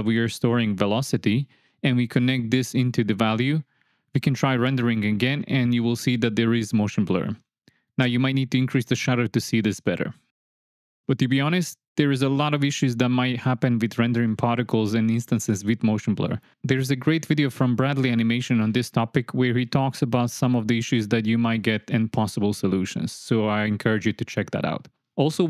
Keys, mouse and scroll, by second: 0.0-2.9 drag, 3.8-4.3 drag, 5.8-7.9 drag, 8.7 click, 9.7 click, 11.2-11.6 drag, 18.8 click, 19.5 click, 24.2 shift+a.